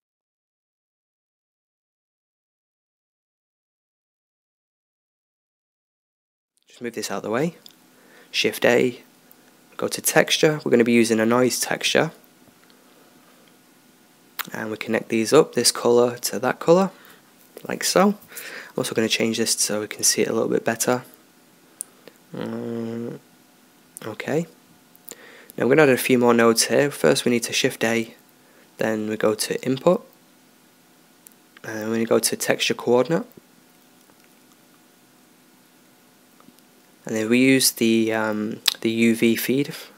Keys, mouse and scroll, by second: 2.6 shift+a, 6.5 click, 6.8-8.2 drag, 8.2 shift+a, 15.6-17.4 drag, 19.3 click, 20.2 click, 24.1-26.2 drag, 26.9 shift+a.